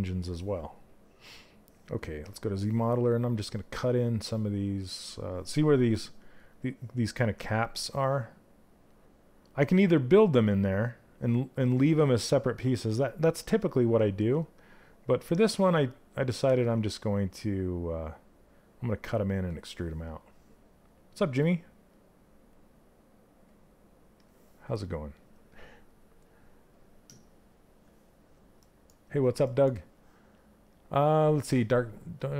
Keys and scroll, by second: 15.9 ctrl+z.